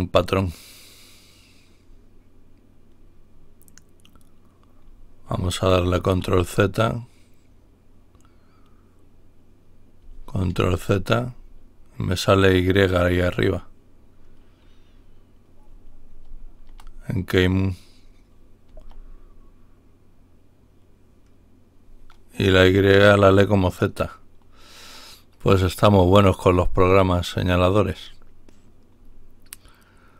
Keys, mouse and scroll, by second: 5.7 ctrl+y, 10.5 ctrl+y, 16.3 ctrl+y, 18.6 y, 22.5 z.